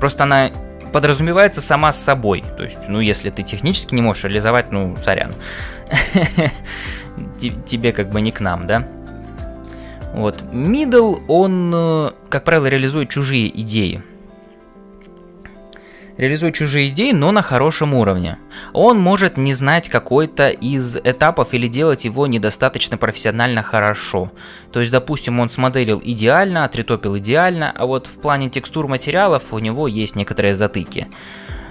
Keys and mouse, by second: 6.8 shift+middle click, 7.3-8.6 middle drag, 9.4 shift+middle click, 20.8 shift+middle click, 21.5-22.9 middle drag.